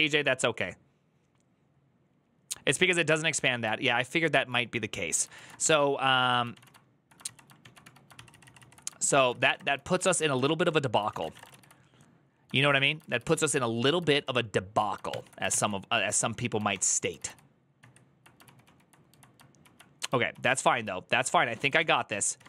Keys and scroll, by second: 4.2 alt+{, 5.1 ctrl+a, 5.4 1, 6.3 ctrl+w, 6.4 k, 7.0 ctrl+c, 7.4 ctrl+w, 7.6 k, 7.9 ctrl+c, 8.4 ctrl+c, 9.0-12.3 typing, 10.3 ctrl+d, 12.3 ctrl+u, 13.0 ctrl+u, 13.9 ctrl+u, 13.9 ctrl+d, 14.9 ctrl+t, 16.5 ctrl+d, 16.7 ctrl+u, 17.5 ctrl+u, 17.5 ctrl+s, 20.1 ctrl+o, 21.6 ctrl+n, 21.9 ctrl+t, 22.0-22.4 typing.